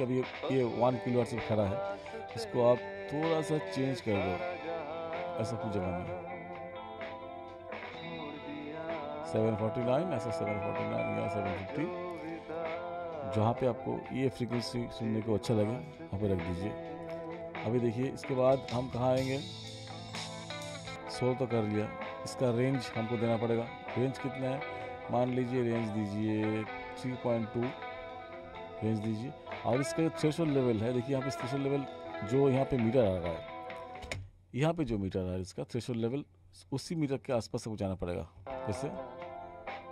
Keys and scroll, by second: 34.1 space, 38.4 space.